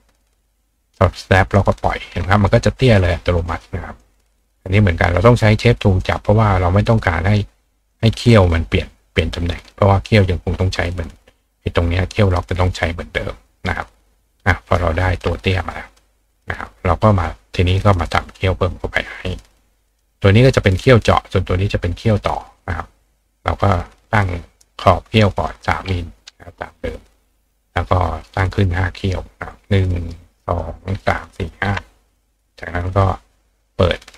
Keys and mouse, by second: 2.5 click, 3.4 click, 4.0 click, 6.0-7.9 ctrl+drag, 13.5 click, 14.1 click, 15.9 click, 16.3 click, 17.7 click, 19.9 click, 22.7-24.1 drag, 25.3 click, 28.2 click, 29.5-30.6 drag, 32.2 click.